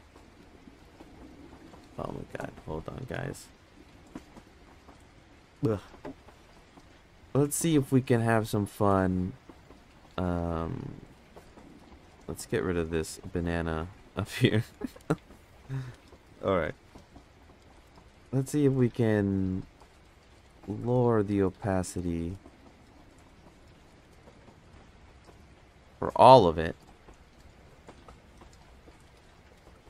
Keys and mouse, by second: 12.6 click, 13.1 click, 14.0 click, 15.0 click, 19.7 click, 21.0 click, 22.0-24.1 drag.